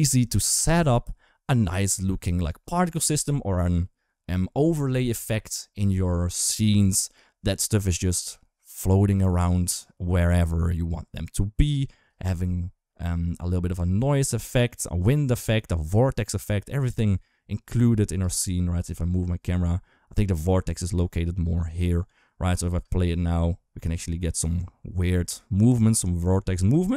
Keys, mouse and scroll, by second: 11.9 space, 18.0 space, 18.6 g, 22.5 space.